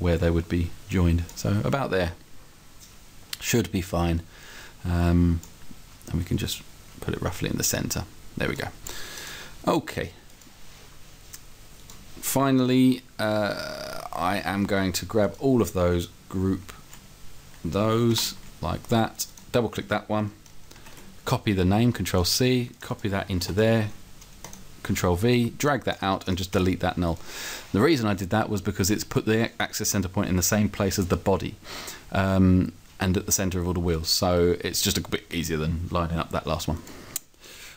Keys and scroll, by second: 18.2 alt+g, 26.6 Delete.